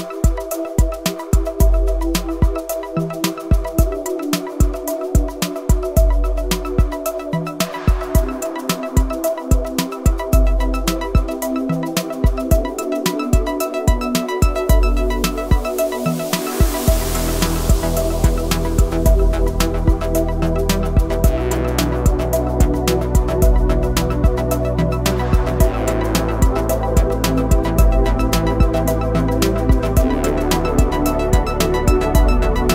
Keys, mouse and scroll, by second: 1.8 typing, 1.9 click, 4.0 ctrl+0, 4.9 click, 6.4 ctrl+alt+shift+e, 7.1 click, 10.5 click, 12.7 Delete, 14.2 click, 15.1 Delete, 15.9-18.3 drag, 22.8 click, 23.1 scroll up 1, 23.7-25.6 typing, 23.7 click, 24.2 scroll up 1, 25.4 click, 26.6-30.6 drag, 30.6 space, 30.7 click, 30.8 space, 31.6-32.7 drag.